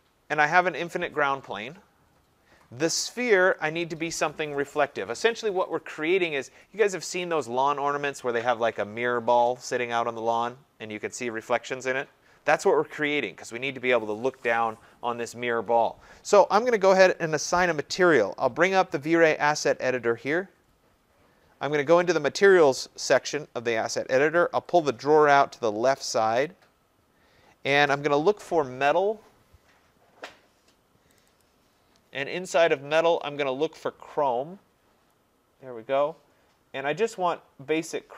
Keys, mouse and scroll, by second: 0.6 click, 3.5 click, 19.2 click, 22.2 click, 24.8 click, 28.4 middle click, 28.6 middle click, 31.2 click, 31.4 click, 31.5-33.6 scroll, 33.7-34.0 scroll, 35.2-35.9 scroll, 35.9 scroll, 36.8-37.3 scroll, 37.3 scroll.